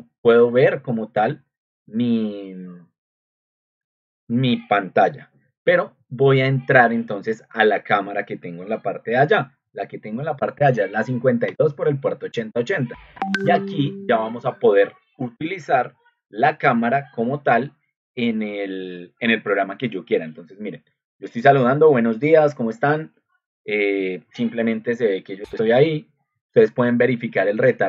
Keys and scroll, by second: 10.1 Delete, 10.6 Delete, 11.4 Return.